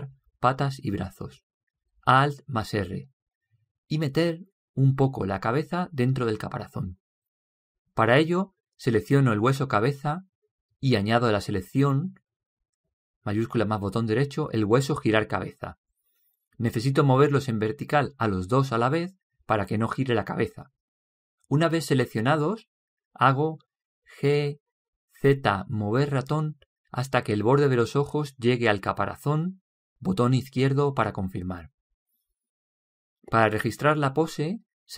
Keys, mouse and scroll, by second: 3.5 alt+r, 10.3 right click, 15.4-16.8 right drag, 16.8-20.2 middle drag, 24.6 g.